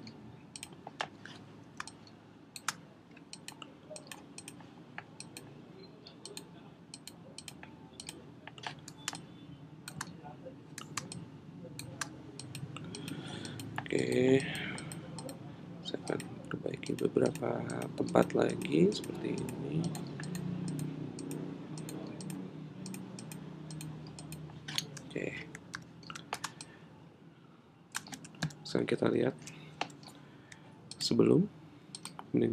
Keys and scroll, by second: 25.7 super+-, 28.4 super+-.